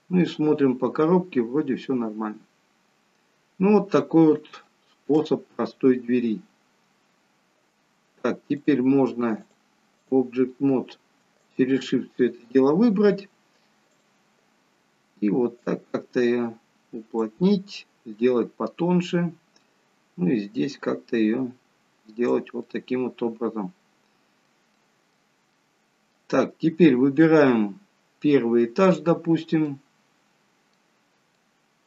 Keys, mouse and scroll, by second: 3.7-4.4 scroll down 2, 4.7 shift+middle click, 8.7 click, 9.5 click, 11.5 shift+click, 14.0 click, 15.7 click, 18.2 middle click, 21.4 click, 22.7 middle click, 24.9 middle click, 27.1 middle click, 27.1-28.9 scroll up 1, 28.9 click, 28.9-29.8 scroll up 3, 29.8 middle click, 31.0-31.8 scroll down 4, 31.4 middle click.